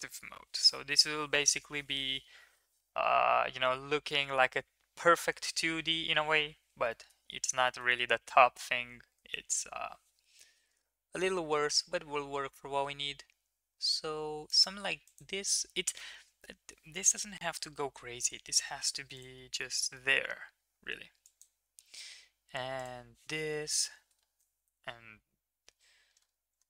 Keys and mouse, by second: 6.9 shift+middle click, 7.6 shift+middle click, 9.2 ctrl+r, 15.1 click, 19.2 click, 21.3 click, 22.8 click, 23.9 g.